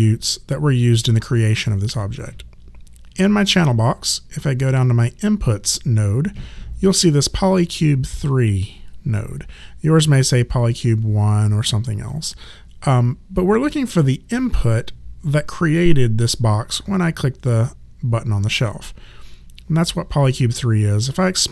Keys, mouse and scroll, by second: 21.0 click.